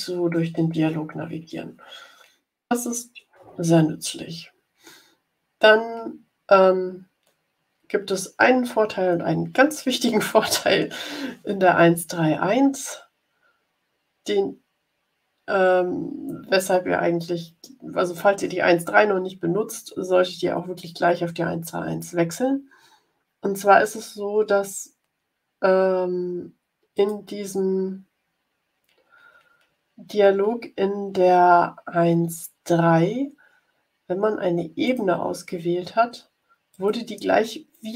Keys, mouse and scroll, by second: 26.8 click, 34.8 click, 36.6 click.